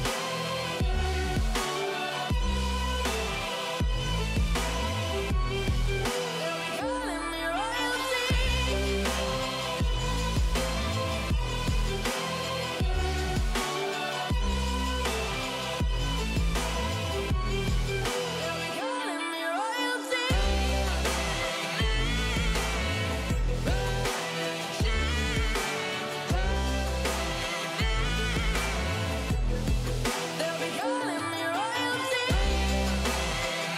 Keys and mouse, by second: 0.0 middle click, 0.3 KP_0, 1.0 middle click, 1.4 s, 2.3 y, 2.4 y, 3.0 click, 3.4-6.8 drag, 9.0 click, 9.8 click, 11.4-12.8 drag, 12.9 click, 14.0 click, 15.7-17.3 drag, 18.1 click, 19.7-20.4 middle drag, 21.4 click, 22.2 click, 22.8 click, 24.0 middle click, 25.5 KP_0, 28.1-30.4 drag, 31.4-32.9 drag.